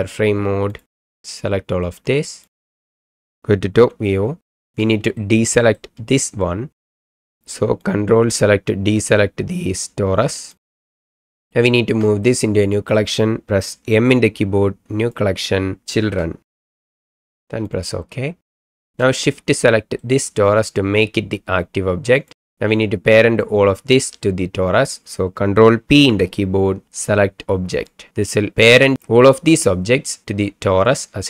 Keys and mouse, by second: 1.0-2.4 middle drag, 2.6 middle drag, 3.8 KP_7, 5.1-5.8 shift+middle drag, 7.8-10.5 ctrl+middle drag, 11.6-12.0 shift+middle drag, 12.4-12.9 middle drag, 14.0 m, 19.3-20.0 shift+drag, 26.0 ctrl+p.